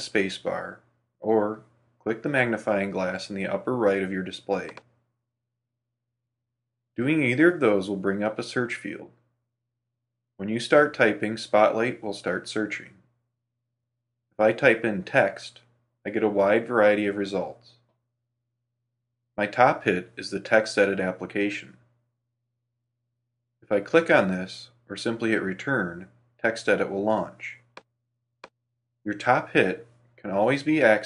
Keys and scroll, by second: 2.9 super+space, 25.7 Return, 29.0 super+q.